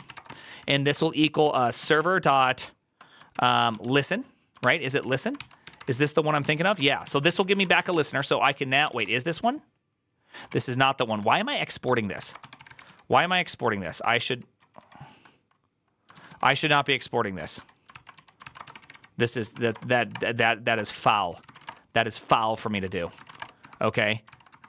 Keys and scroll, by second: 0.0-19.8 typing, 6.3 ctrl+c, 12.7 ctrl+k, 13.1 ctrl+k, 17.3 ctrl+}, 17.3 ctrl+c, 19.3 ctrl+Left, 19.5 Right, 20.0 Return, 20.6 Return, 21.0 ctrl+c, 21.2-24.6 typing, 22.8 ctrl+c, 24.1 ctrl+c.